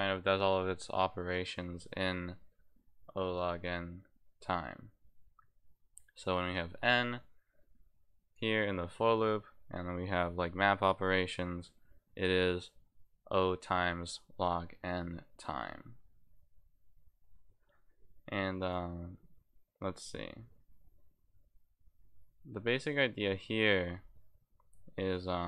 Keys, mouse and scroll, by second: 7.2-8.3 drag, 9.2 click, 18.6 click, 22.8 click, 23.3-25.1 drag.